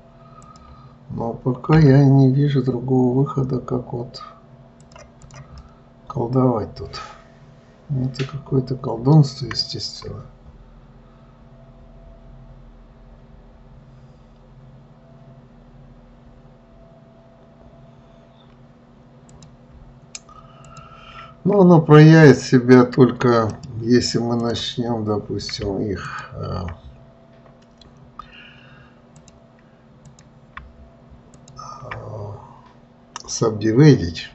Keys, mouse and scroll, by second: 0.7 click, 2.1 g, 5.6 click, 5.9-9.0 middle drag, 19.6 click, 20.9 shift+click, 23.9-26.4 right drag, 26.4 shift+click, 29.5 click, 30.4 click, 31.7 shift+click.